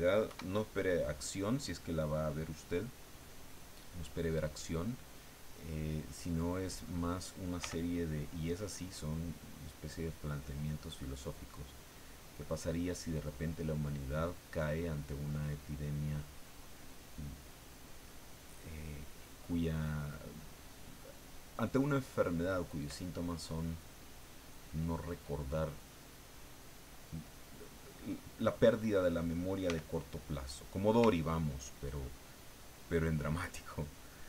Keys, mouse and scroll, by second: 0.3 KP_1, 2.5 click, 3.3 click, 4.8 click, 5.7 click, 7.6 f, 8.1 click, 8.5-14.9 drag, 15.0-16.5 drag, 17.1-21.2 drag, 21.3 click, 23.2-26.5 drag, 29.7 f, 30.2 click, 31.3 ctrl+click, 32.4 ctrl+click.